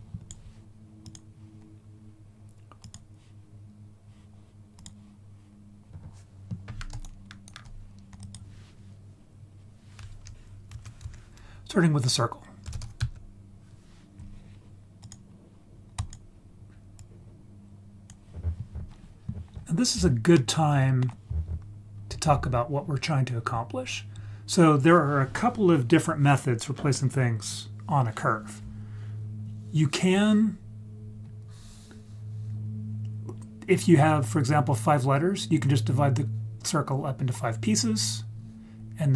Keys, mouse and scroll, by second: 0.0 click, 1.0-2.9 drag, 4.8 click, 5.9 right click, 7.0 ctrl+right click, 8.2 click, 10.7 shift+a, 17.0-18.1 drag, 19.5-20.3 scroll up 3, 20.3-21.0 middle drag, 21.7-22.0 scroll down 1, 22.0-22.7 scroll up 1, 23.1 scroll down 3, 23.8-24.5 scroll up 1, 24.5 scroll up 1, 31.2 click, 35.8 click, 36.8 click, 38.0 click, 39.0 click.